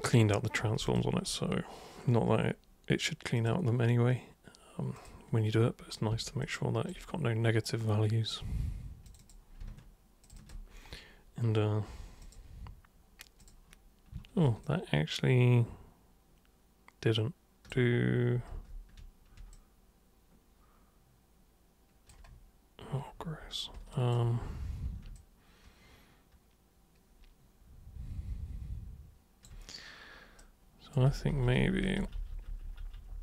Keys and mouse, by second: 0.8 ctrl+shift+super+click, 3.4 super+click, 5.0 super+click, 6.4 alt+super+click, 7.6 super+right click, 9.1 super+click, 10.2 ctrl+shift+super+click, 10.4 ctrl+shift+super+click, 12.2 super+click, 13.3 super+click, 14.6-17.7 alt+super+drag, 18.5 ctrl+super+z, 19.5-22.1 alt+super+drag, 23.9 alt+super+click, 25.2-29.4 alt+super+drag, 30.4 super+right click, 31.0 ctrl+super+z, 31.3 ctrl+super+z, 31.6 ctrl+super+z, 31.9 ctrl+super+z, 32.2 ctrl+super+z, 32.5 ctrl+super+z, 32.9 ctrl+super+z.